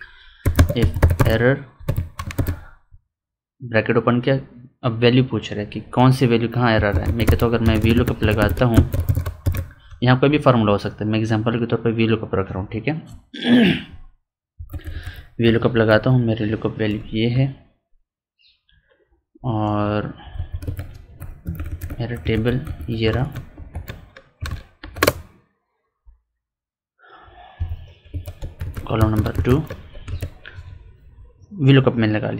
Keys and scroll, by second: 14.5 Up, 14.6 Left, 15.0 Up, 15.4 Right, 15.8 Down, 20.3 F4, 21.3 Up, 21.5 Left, 21.7 Up, 21.8 Left, 22.2 Up, 22.4 Left, 22.5 Up, 22.7 Left, 23.1 ctrl+shift+Up, 24.7 ctrl+shift+Right, 27.5 F4.